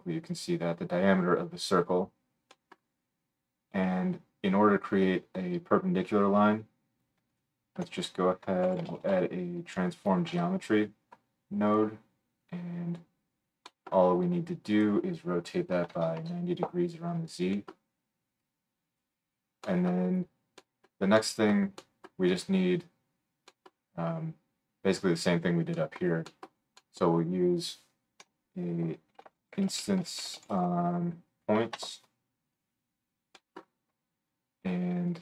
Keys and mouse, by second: 4.3-7.4 middle drag, 7.4-12.4 drag, 7.8 F3, 12.4-28.2 middle drag, 24.8 click, 24.8 right click, 28.2 F3, 32.6 click, 33.3 right click, 33.3 click, 33.5-35.1 right drag.